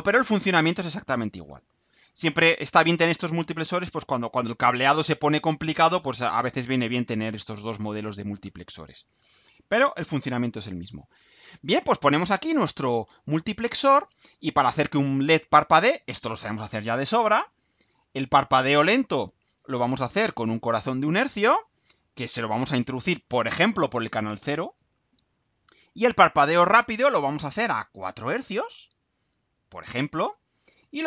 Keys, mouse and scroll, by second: 1.4 click, 3.0 Delete, 9.0-10.7 drag, 12.1-13.4 drag, 20.3 click, 22.3 click, 23.7-25.1 drag, 28.6 click, 30.3 click.